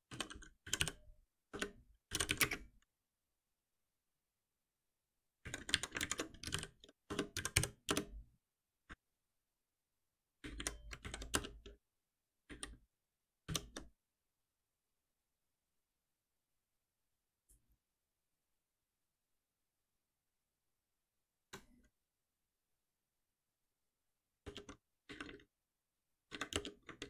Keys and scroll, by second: 1.5 Return, 6.0 ctrl+shift+Left, 7.4 Return, 8.9 ctrl+s, 11.0 alt+Delete, 13.4 shift+F10.